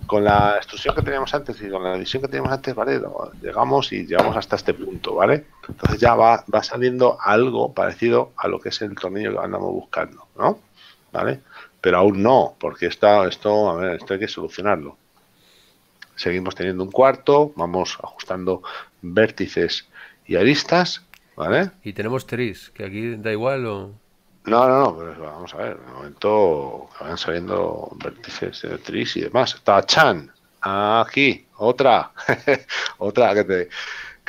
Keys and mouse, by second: 15.8 middle click, 22.5 click, 28.2 KP_Decimal.